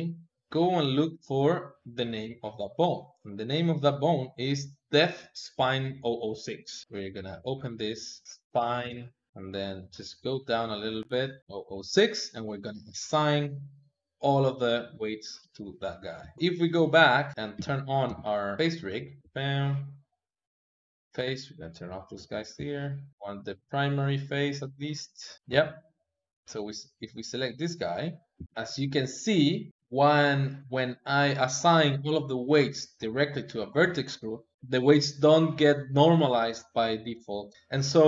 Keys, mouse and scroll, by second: 2.2 ctrl+Tab, 3.0 click, 6.6 click, 6.8 Tab, 7.2 click, 8.0 click, 8.2 BackSpace, 10.8-11.4 scroll down 2, 11.4 click, 13.0-14.8 drag, 14.8-16.0 middle drag, 16.0 KP_3, 16.3 ctrl+Tab, 16.6 middle click, 17.3 n, 17.9 n, 18.6 click, 19.2 a, 20.8 click, 21.4 click, 22.2 n, 22.6 middle click, 23.1 n, 23.4 click, 24.0 click, 24.6-26.1 middle drag, 26.1-27.1 drag, 27.6 middle click, 28.2 g, 37.2 click, 37.5 middle click.